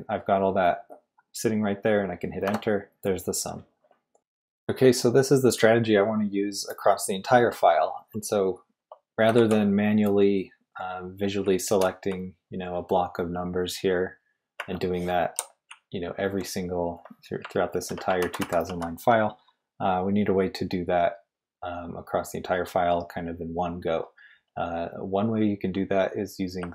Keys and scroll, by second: 2.4 Return, 4.2 typing, 9.3 shift+v, 11.4-12.1 typing, 14.6 Escape, 14.6-16.5 typing, 17.5 ctrl+d, 17.7 ctrl+d, 18.2 ctrl+u, 18.4 ctrl+u, 18.6 ctrl+u.